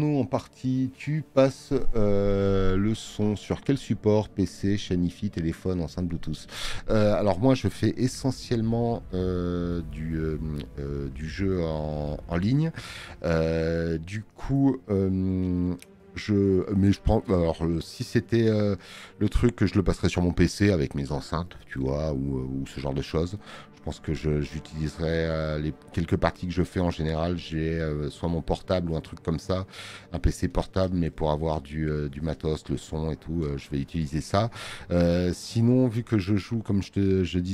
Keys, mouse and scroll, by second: 8.0 click, 8.0 space.